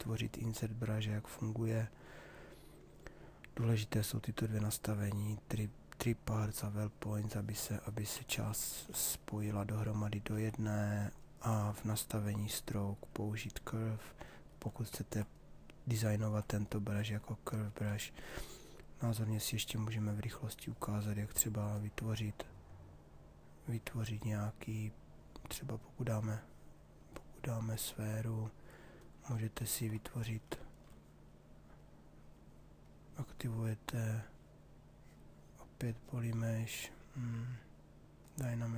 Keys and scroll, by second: 10.0 ctrl+z.